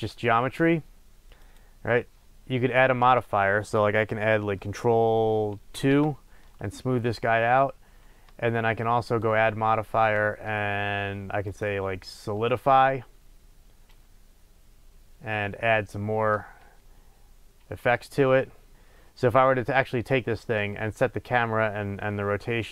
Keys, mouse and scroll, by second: 1.4 click, 5.8 ctrl+2, 9.1-18.7 drag, 18.7 space.